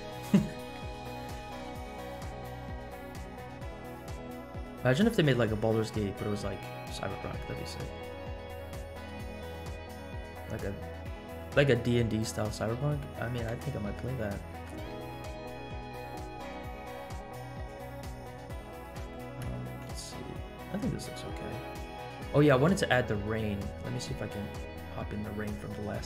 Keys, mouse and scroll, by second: 0.0 middle click, 0.4-1.0 scroll up 4, 1.2 middle click, 1.8 scroll down 1, 2.1-3.3 middle drag, 3.4 scroll down 2, 3.8-4.2 middle drag, 4.5-4.8 scroll up 2, 4.8-5.1 middle drag, 5.5-5.8 middle drag, 7.0-7.6 scroll down 4, 8.5-9.6 scroll up 5, 10.1-10.4 scroll up 2, 12.7-13.3 scroll down 3, 14.0 shift+middle click, 15.0-15.6 scroll up 2, 15.7 scroll up 1, 16.4 scroll down 2, 17.2-17.5 scroll up 2, 17.9-18.2 scroll down 2, 18.3 scroll up 2, 19.1 shift+middle click, 19.6 scroll down 1, 19.9 space, 22.1 space.